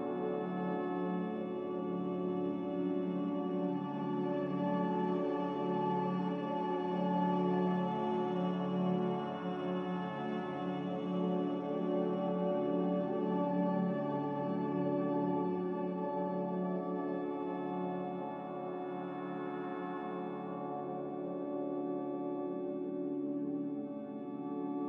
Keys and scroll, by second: 5.8 ctrl+r.